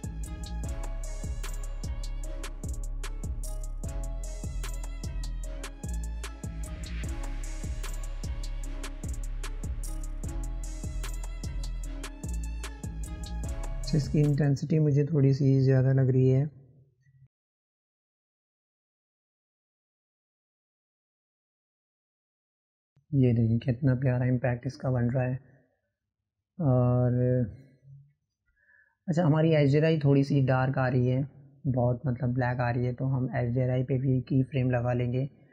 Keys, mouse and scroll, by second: 2.3-9.9 drag, 10.9-13.2 drag, 13.8 click, 14.8-19.7 drag, 26.0 click, 29.9-35.5 drag.